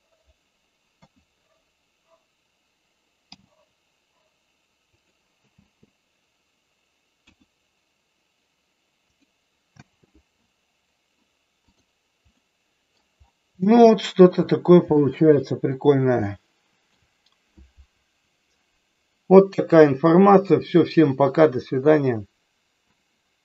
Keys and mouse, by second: 0.9 KP_1, 3.4 g, 4.9 click, 5.5 space, 7.2 KP_1, 9.0 click, 9.9 space, 11.7 click, 12.4 middle click, 13.7 shift+middle click, 14.9 middle click, 16.2 shift+middle click.